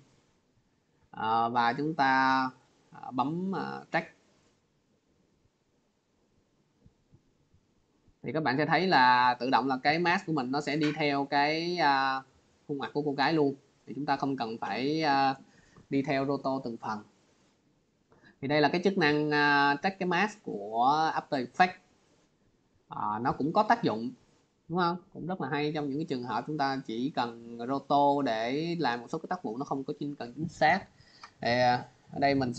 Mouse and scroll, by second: 3.8 click, 8.9 click, 30.7 click.